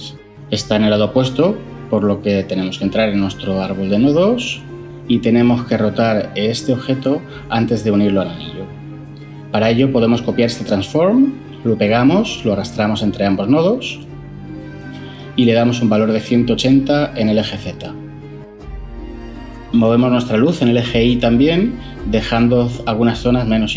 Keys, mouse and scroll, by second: 11.2 ctrl+c, 11.7 ctrl+v, 17.3-17.8 typing.